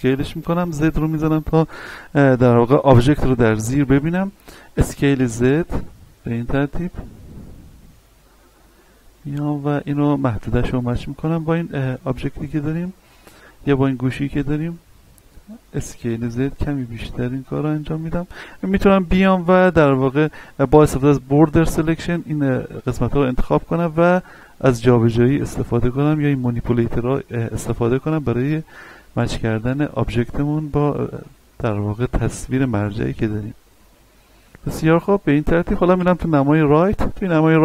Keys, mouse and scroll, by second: 0.6 z, 1.1-2.9 scroll down 1, 4.7 s, 5.1 z, 11.3 click, 11.7-12.3 scroll up 1, 12.4 shift+middle click, 13.0 scroll up 1, 13.4 shift+middle click, 14.6 scroll up 1, 15.7 s, 16.1 z, 17.9 click, 18.3-19.7 scroll down 1, 19.7 a, 20.7 b, 21.2 click, 21.9-22.6 scroll up 1, 22.7 shift+middle click, 23.1-24.2 scroll up 1, 24.2-27.3 drag, 27.3-27.6 scroll down 1, 27.7 shift+middle click, 28.9 shift+middle click, 29.2 scroll up 1, 29.6 shift+middle click, 30.1 a, 31.2 b, 31.5-34.4 drag, 34.4-35.2 scroll down 1, 36.7 shift+middle click, 37.3 a.